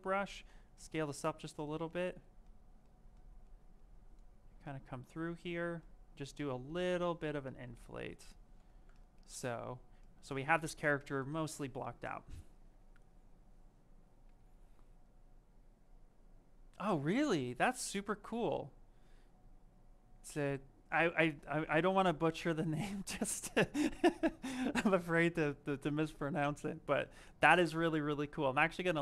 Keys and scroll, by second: 8.4 shift+f.